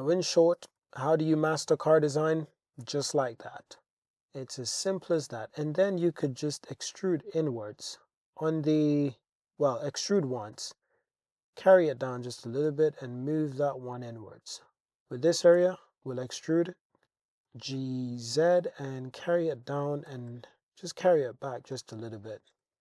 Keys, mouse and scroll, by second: 0.6 g, 0.8 y, 1.6 click, 2.8 g, 3.0 y, 3.5 click, 5.3 alt+z, 6.1 e, 6.6 x, 8.9 click, 10.2 g, 10.6 z, 12.0 click, 12.4 g, 12.7 x, 13.7 click, 14.0 Tab, 14.7 Tab, 15.6 e, 16.0 click, 16.4 z, 17.5 g, 17.8 z, 19.2 click, 20.1 g, 20.3 y, 21.6 click, 21.8 Tab, 22.6 Tab.